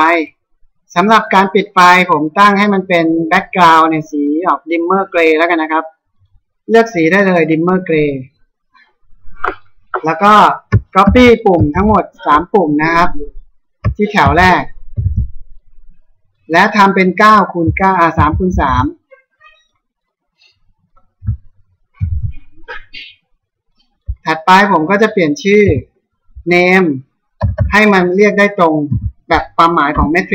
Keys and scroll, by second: 11.0 ctrl+c, 11.7 ctrl+v, 25.7 F4, 26.5 Home, 27.4 Down, 28.9 t, 29.9 BackSpace.